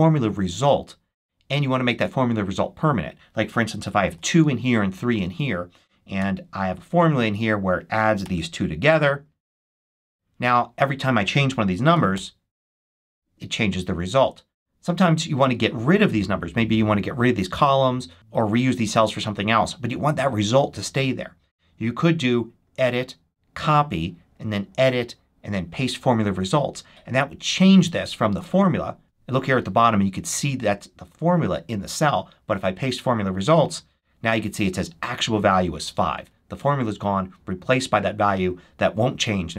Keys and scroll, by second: 4.0 2, 4.3 Right, 4.6 3, 5.0 Right, 6.1 =, 8.1 shift+=, 9.8 Return, 11.8 8, 12.0 Return, 14.1 super+z.